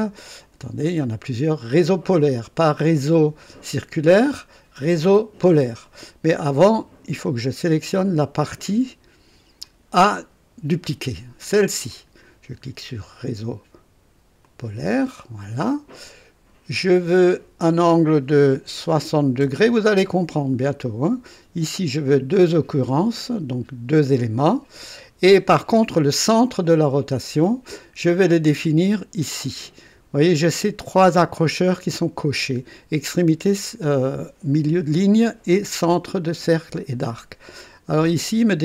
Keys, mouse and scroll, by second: 0.6 click, 5.8 click, 9.6 click, 14.4 click, 17.2 click, 19.0 KP_6, 19.4 KP_0, 21.5-22.2 scroll down 2, 21.5 typing, 22.7 scroll down 1.